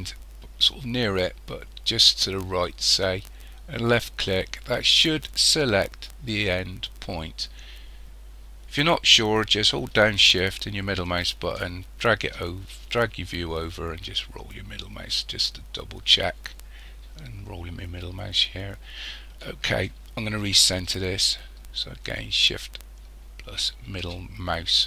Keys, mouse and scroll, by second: 3.8 click, 10.8-13.6 shift+middle drag, 13.6-14.8 scroll up 8, 14.8-16.6 scroll up 1, 16.6-19.8 scroll down 12, 19.8-22.9 shift+middle drag, 24.5-24.8 scroll up 2.